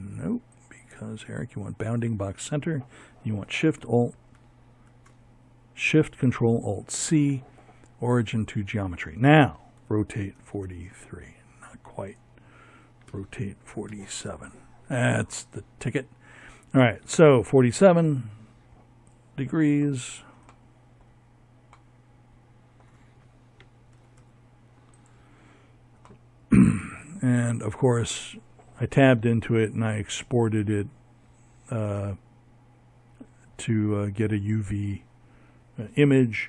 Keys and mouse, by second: 2.2 ctrl+alt+shift+c, 7.6 r, 10.9 r, 15.6 KP_7, 18.5 middle click, 18.7 middle click, 19.5 middle click, 21.7 g, 26.9 Tab.